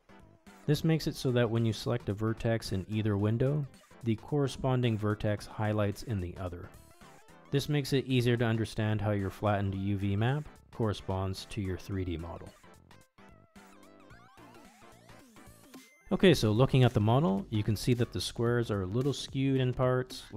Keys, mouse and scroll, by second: 1.9 click, 5.1 click, 6.0 click, 7.0 click, 7.5 click, 8.0 click, 8.8 click, 9.2 click, 9.7-10.4 drag, 10.7 click, 11.1 click, 11.5 click, 12.1 click, 12.4 click, 14.7-16.1 middle drag, 16.5 Tab, 17.8 click.